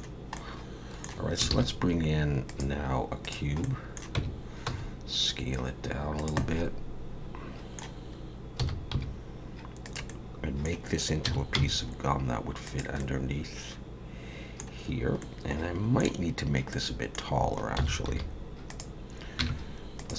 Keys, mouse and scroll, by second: 0.4 middle click, 1.5 shift+a, 3.6 middle click, 4.2 Tab, 6.0 s, 6.4 middle click, 8.6 s, 10.1 middle click, 11.3 s, 13.0 middle click, 15.2 middle click, 16.7 middle click, 17.8 s, 19.4 Tab, 20.0 click.